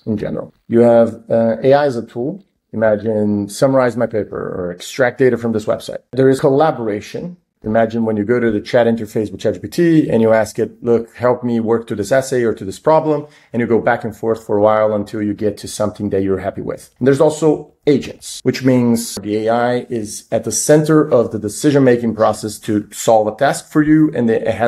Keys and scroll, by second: 0.7 super+Down, 1.2-2.0 typing, 6.2 super+Down, 16.7 super+Down.